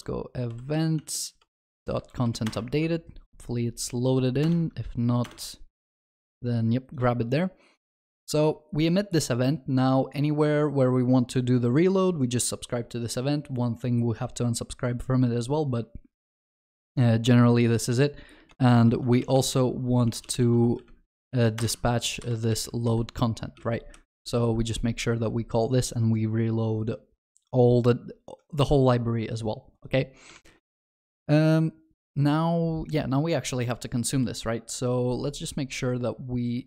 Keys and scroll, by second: 2.5 Return, 21.6 Return, 24.2 ctrl+b, 30.5 ctrl+s.